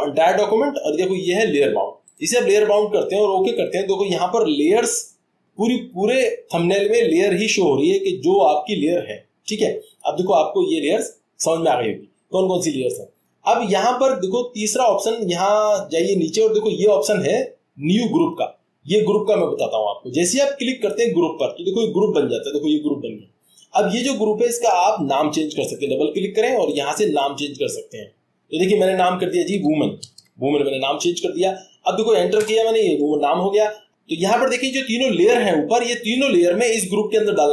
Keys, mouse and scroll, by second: 32.6 click, 33.7 click, 36.9 click.